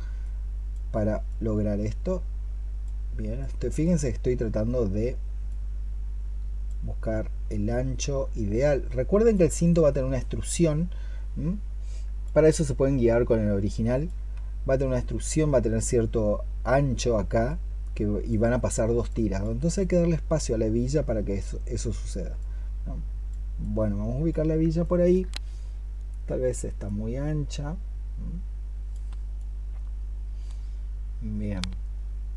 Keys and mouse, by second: 24.7 alt+click.